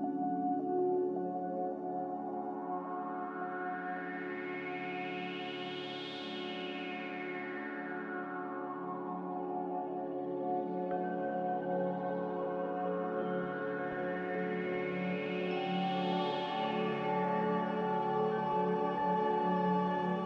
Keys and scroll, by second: 7.8 Escape, 8.1 Escape, 8.6 Escape, 11.5 ctrl+s.